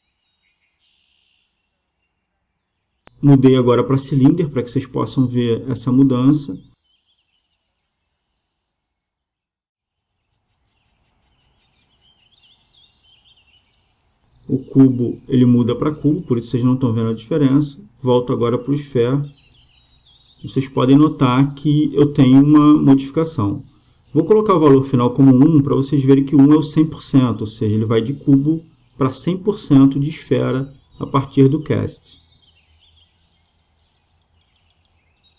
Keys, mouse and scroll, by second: 2.8-4.7 drag, 6.0-7.8 drag, 12.5-14.3 drag, 15.6-17.3 drag, 17.5-19.4 drag, 20.8-22.6 drag, 24.3-26.1 drag, 27.7-29.6 drag, 31.5 KP_0, 33.0-34.8 drag.